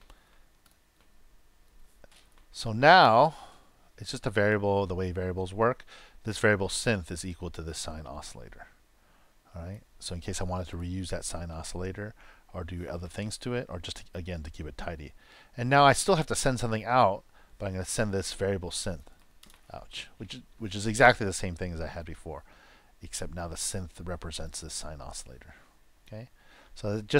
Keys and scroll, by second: 1.5 super+v.